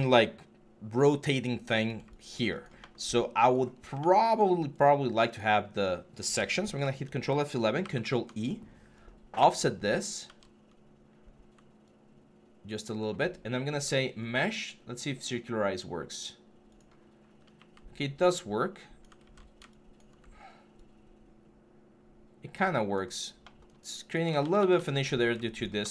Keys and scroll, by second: 6.5 ctrl+F11, 7.6 ctrl+e, 10.0 ctrl+z, 19.0 ctrl+z, 24.2 ctrl+z.